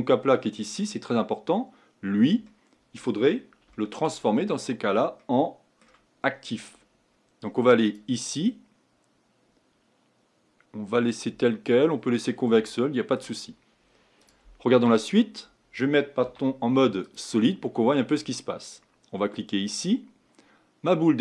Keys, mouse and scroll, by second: 0.5-2.5 drag, 2.5-4.3 middle drag, 4.3-5.2 scroll up 4, 5.2-7.8 middle drag, 7.8-12.1 drag, 12.1-12.7 scroll down 3, 12.7-14.2 shift+middle drag, 14.2-16.2 drag, 16.2 z, 17.6-19.7 middle drag, 19.7-21.2 drag.